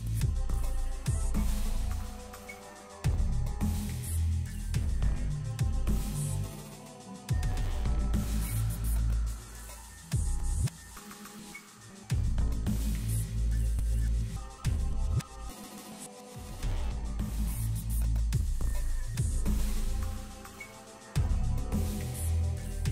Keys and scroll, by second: 11.5 ctrl+shift+space, 12.1 d, 12.8 s, 13.6 g, 14.6 shift+g, 15.7 shift+space, 21.4 Escape, 21.4 g.